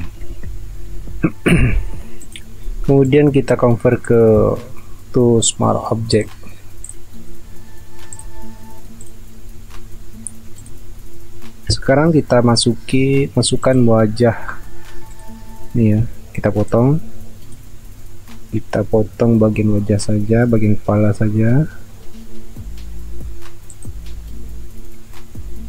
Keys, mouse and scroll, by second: 0.0-0.3 typing, 9.6 alt+scroll down 1, 11.0 alt+scroll up 1, 14.6 alt+scroll up 1, 16.0 r, 18.0-19.5 alt+scroll up 1, 19.5 p, 24.2 alt+scroll down 1, 24.7-25.6 alt+scroll up 1.